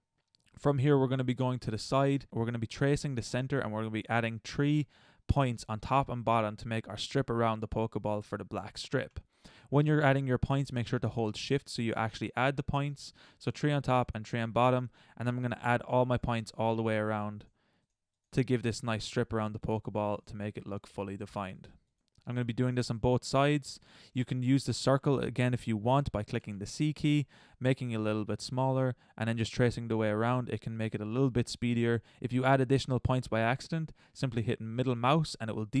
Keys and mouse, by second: 0.1 middle click, 1.5-2.0 middle drag, 2.2 ctrl+z, 11.5-15.8 right drag, 24.6 middle click, 25.4-26.4 middle drag, 26.4 c, 27.0 click, 27.8-35.8 drag.